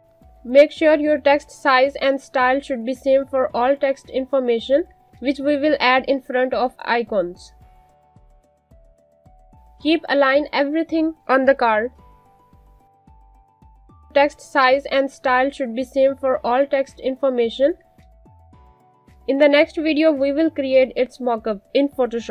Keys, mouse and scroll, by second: 1.0 click, 2.5 alt+scroll up 2, 2.7 Up, 3.6 Down, 4.0 click, 4.6 alt+click, 5.4 click, 5.9-9.4 typing, 9.3 click, 10.7 space, 10.8 click, 11.5 alt+click, 12.9 click, 13.2 Left, 14.2 click, 14.5-16.9 typing, 17.0 click, 17.8 click, 18.2 click, 19.0-22.3 typing.